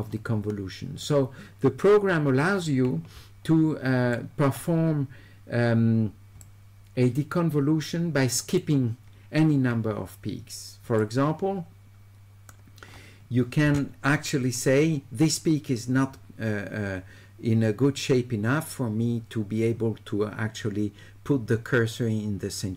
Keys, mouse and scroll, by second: 1.0-4.2 right drag, 6.4-8.6 shift+right drag, 11.0-12.5 shift+right drag.